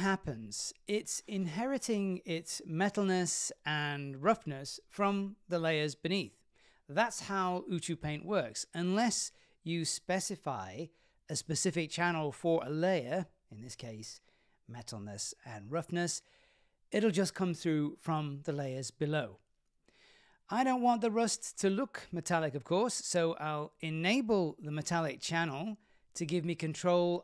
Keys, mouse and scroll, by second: 5.7-8.2 drag, 8.7-9.7 drag, 10.0-10.8 middle drag, 11.0 scroll down 2, 11.3-12.0 middle drag, 12.3 scroll up 2, 20.1-21.1 drag, 21.4 middle drag, 21.7 scroll up 1, 21.8 scroll down 5, 22.0 scroll up 1, 22.1-24.5 middle drag, 25.2 click, 26.5 click.